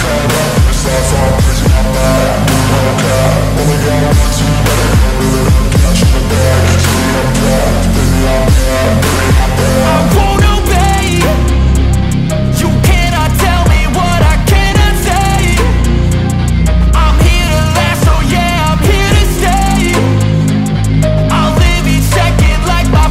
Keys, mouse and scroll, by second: 0.1 alt+middle click, 0.4 alt+click, 0.7-1.3 scroll up 1, 1.4 shift+click, 1.8-2.5 scroll up 1, 2.7 shift+click, 4.6 shift+click, 6.5 shift+click, 6.8 right click, 10.7 right click, 13.6 Delete, 15.2-15.9 scroll down 1, 16.7 shift+click, 18.8 shift+click, 21.0 alt+middle click, 21.2 scroll up 1.